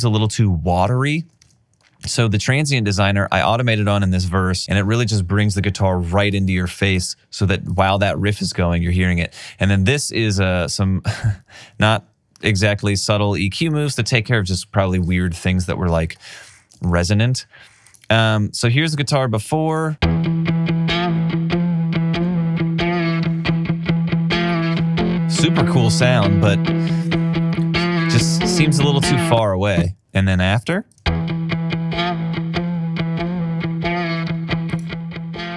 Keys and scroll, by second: 17.2 alt+super+w, 20.0 space, 31.0 super+space.